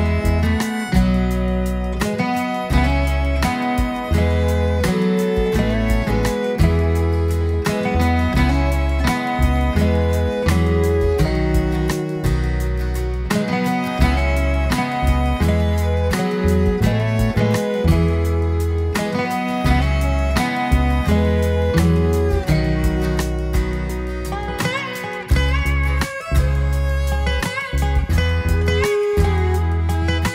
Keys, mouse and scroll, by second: 1.0 click, 1.5 click, 2.7 click, 3.3 click, 4.6 click, 5.0-7.1 scroll down 5, 7.1 click, 8.1-8.7 scroll up 2, 8.7-9.8 middle drag, 10.2-11.4 scroll up 8, 12.1-14.2 scroll down 3, 14.9 KP_1, 15.9 click, 17.2 shift+d, 17.3 x, 18.1 click, 19.6 click, 21.8 click, 23.4 click, 24.7-25.3 scroll down 1, 25.3 click, 25.9-26.6 middle drag, 28.0 click, 28.9 shift+d, 29.3 x, 30.0 click.